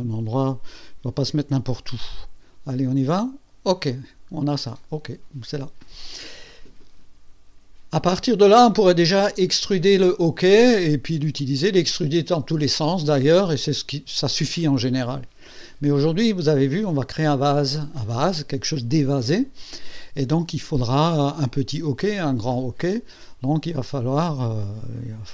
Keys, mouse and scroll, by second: 3.1 click, 3.9 scroll down 1, 4.6-6.0 right drag.